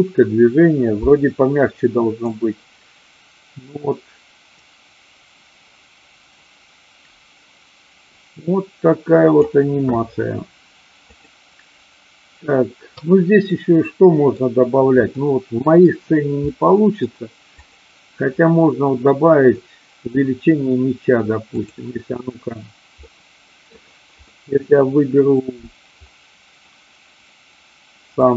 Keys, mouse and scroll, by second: 2.3-9.4 drag, 11.1-12.9 drag, 13.4 middle click, 15.1 middle click, 16.4 middle click, 17.5 click, 19.5 middle click, 21.4 click, 23.0-23.7 middle drag, 24.3-25.5 middle drag, 28.1 click.